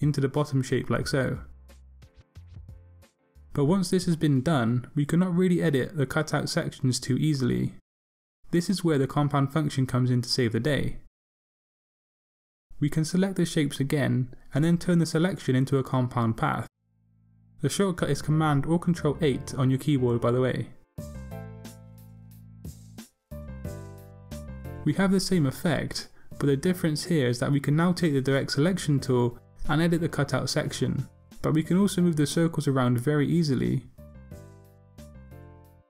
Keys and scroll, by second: 23.4 super+8, 30.5 a.